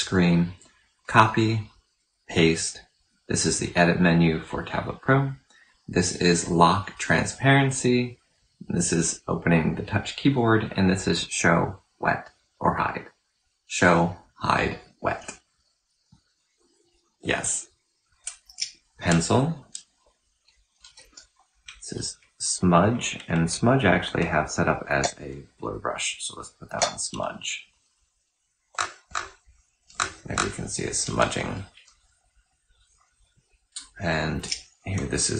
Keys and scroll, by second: 18.3 n, 20.7-21.4 typing, 24.8 F8, 34.2 typing.